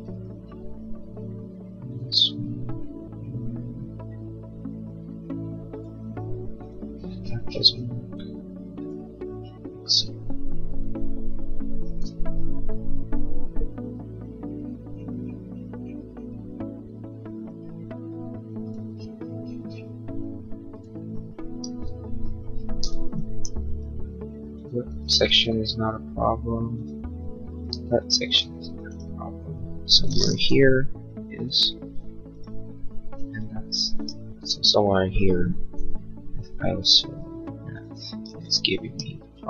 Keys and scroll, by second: 21.5 e, 23.3 l, 27.7 e, 30.4 l, 33.0 e, 38.2 e.